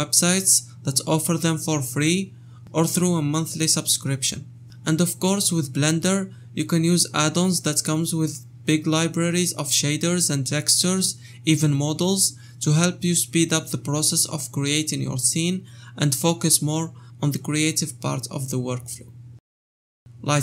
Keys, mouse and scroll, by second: 1.7 shift+middle click, 2.1 click, 2.7 click, 2.9-3.3 scroll up 4, 3.3-4.3 shift+middle drag, 4.7 click, 6.2 shift+middle click, 6.4 scroll down 2, 7.0 shift+middle click, 7.2 scroll down 2, 7.4 shift+middle click, 7.8 scroll down 1, 8.0 shift+middle click, 8.4 Tab, 8.6 scroll down 2, 8.8 shift+click, 9.0 shift+middle click, 9.5 click, 9.9 shift+middle click, 10.6 Tab, 10.9 click, 11.6 o, 13.8 scroll down 3, 14.0 shift+middle click, 14.6 Tab, 14.8 u, 15.4 scroll down 2, 15.6 shift+middle click, 16.4 click, 16.6-19.3 typing, 16.8 shift+middle click, 17.6 scroll down 4, 17.8 scroll up 5, 18.9 shift+middle click, 19.1 scroll up 3, 19.5 Tab.